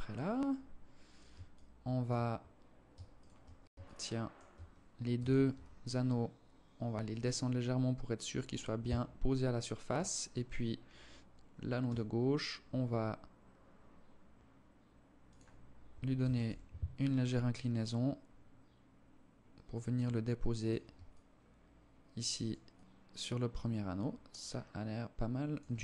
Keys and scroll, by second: 4.3 g, 10.9 r, 15.3 g, 25.1 KP_0.